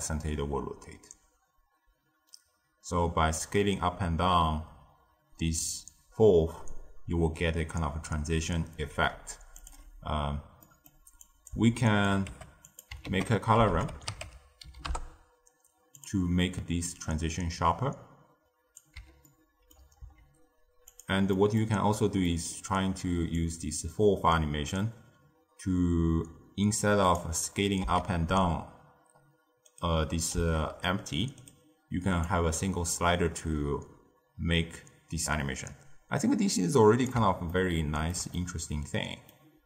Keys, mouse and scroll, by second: 10.5-11.1 middle drag, 11.1 click, 11.7 shift+right click, 12.2 g, 13.0 ctrl+a, 16.8-19.2 drag, 19.2-19.9 ctrl+middle drag, 19.9 s, 21.2 middle click, 21.7-22.0 scroll up 2, 22.2-23.3 middle drag, 23.3-26.3 drag, 27.7 s, 30.3 s, 32.2-35.2 drag, 37.4-39.6 ctrl+middle drag.